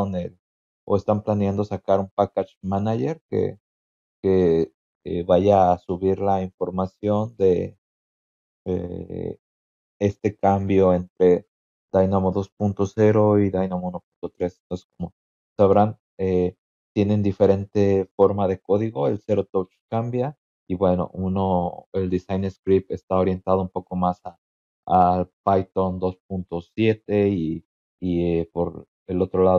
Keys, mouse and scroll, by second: 2.9 scroll down 2, 3.7-4.7 scroll down 6, 7.7 scroll down 2, 8.6-8.9 scroll down 4.